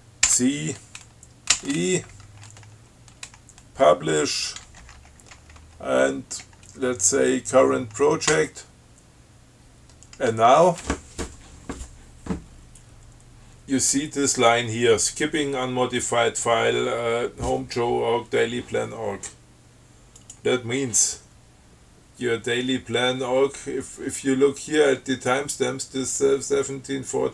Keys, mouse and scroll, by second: 0.5 ctrl+c, 1.8 ctrl+e, 5.1 shift+p, 8.6 p, 20.5 click.